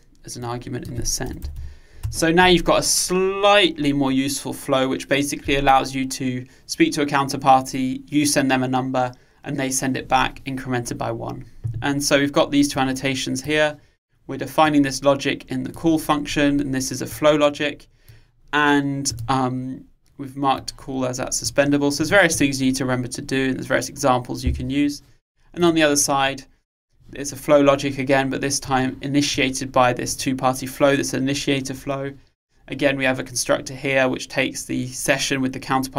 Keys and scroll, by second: 2.2 Return.